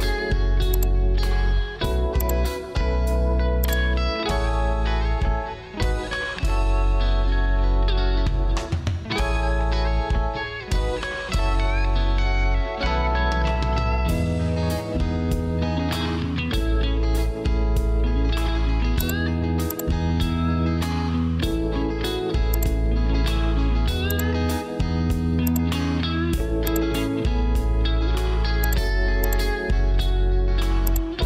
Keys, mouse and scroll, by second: 4.6 alt+e, 14.9 Return.